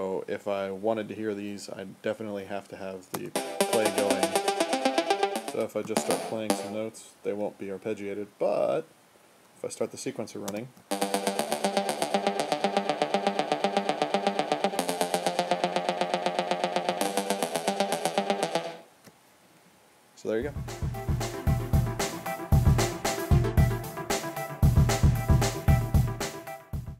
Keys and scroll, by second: 3.1 space, 5.6-6.9 typing, 10.4-13.1 typing, 14.6-19.3 typing, 21.0 space.